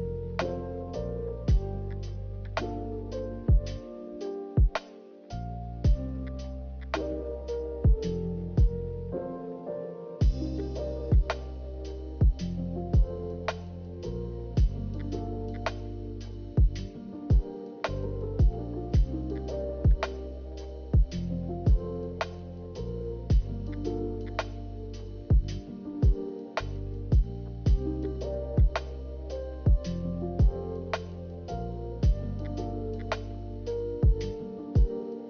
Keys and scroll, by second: 2.7 b, 3.8 a, 8.8 b, 10.1 ctrl+z, 14.9 a, 15.2 ctrl+z, 16.9 b, 17.6 n, 19.2 ctrl+z, 20.0 a, 21.0 m, 24.8 a, 27.9 a, 28.3 a, 33.0 b.